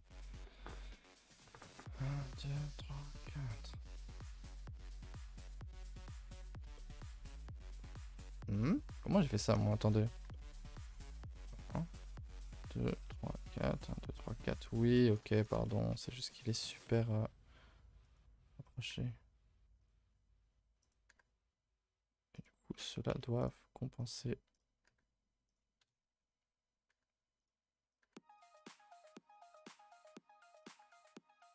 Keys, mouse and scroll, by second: 0.7-3.7 scroll down 1, 4.4-8.6 shift+middle drag, 8.6 scroll up 2, 9.3-9.6 scroll up 2, 9.6 shift+middle click, 9.9-10.3 scroll up 1, 10.3 shift+middle click, 11.1 click, 11.8 click, 12.4 click, 13.0 click, 13.3 click, 13.8 click, 14.2 scroll down 5, 14.3 scroll up 1, 14.4 shift+middle click, 15.3 click, 15.6 shift+middle click, 16.0 scroll up 1, 16.4-16.8 scroll down 2, 16.8 g, 18.6 click, 18.8 g, 20.8 click, 21.0 g, 22.7-23.0 scroll down 1, 23.0 z, 23.9 click, 24.1 z, 24.8 g, 25.7 KP_0, 26.4-26.8 scroll up 1, 26.8 g, 27.8 click, 28.0 g, 29.4-30.6 drag, 30.8 g.